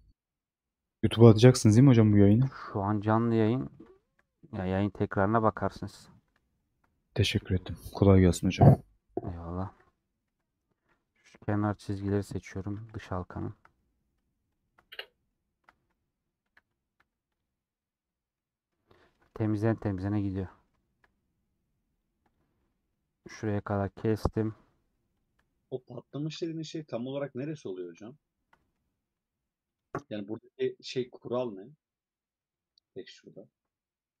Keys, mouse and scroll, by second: 0.0-0.3 scroll down 2, 0.3-1.9 middle drag, 1.9 click, 3.2 scroll down 2, 3.4-6.2 middle drag, 6.2 click, 7.2 a, 8.6-10.3 middle drag, 10.3 3, 11.1-13.0 middle drag, 13.0 ctrl+click, 13.5 ctrl+click, 13.7 middle click, 14.6 ctrl+click, 14.8 middle click, 16.5 a, 17.5 u, 18.0 scroll down 5, 18.3 middle click, 18.8 scroll up 2, 19.0-21.4 middle drag, 21.4-22.0 scroll up 1, 22.0 click, 22.3 click, 23.3 ctrl+click, 23.9-25.2 middle drag, 25.2 click, 26.7-27.9 middle drag, 27.9 click, 28.5 middle click, 28.7 scroll up 2, 29.8 ctrl+Left, 30.5 scroll down 2, 30.8-34.2 middle drag.